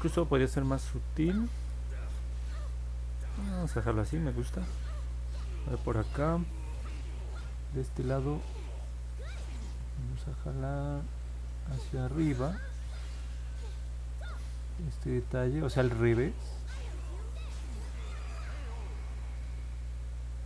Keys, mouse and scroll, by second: 0.1-4.1 alt+middle drag, 4.4 scroll up 1, 5.3 alt+middle click, 10.0 click, 11.1 click, 11.5 click, 11.9 click, 12.3 click, 12.7 click, 13.0 click, 13.4 click, 13.8 click, 14.1 click, 14.5 click, 14.8 click, 15.2 click, 15.5 click, 15.9 click, 16.2 click, 16.6 click, 16.9 click, 17.3 click, 17.6 click, 17.9 click, 18.2 click, 18.5 click, 18.9 click, 19.1 click, 19.4 click, 19.7 click, 20.0 click, 20.3 click.